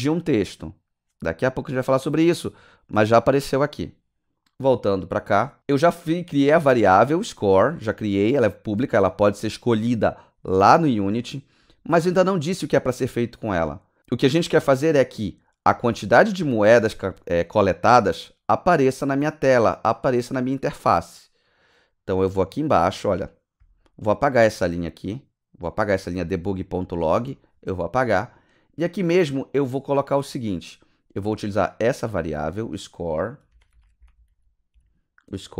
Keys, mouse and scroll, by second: 4.9 click, 6.4 click, 7.0 click, 8.5 click, 15.9 click, 16.1 click, 21.7 click, 24.9 click, 27.2 BackSpace, 33.3-34.7 typing.